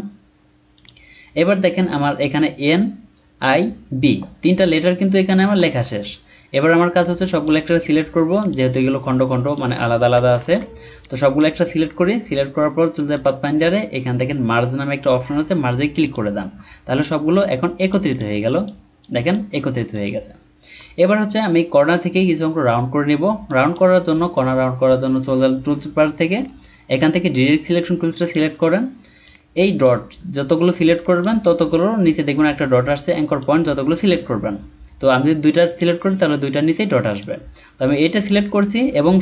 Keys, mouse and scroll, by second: 0.0-0.4 scroll down 1, 5.5 alt+scroll down 1, 10.4 ctrl+z, 18.1 double click, 20.9-21.3 alt+scroll up 1, 26.3 right click, 28.3 right click.